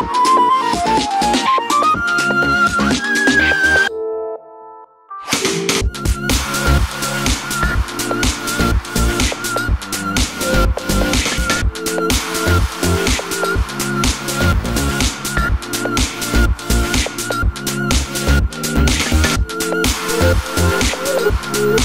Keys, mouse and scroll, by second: 0.8-1.9 scroll down 2, 4.5 scroll up 1, 5.7 KP_1, 12.4 click, 19.1-19.7 scroll up 2, 19.7-21.8 shift+middle drag.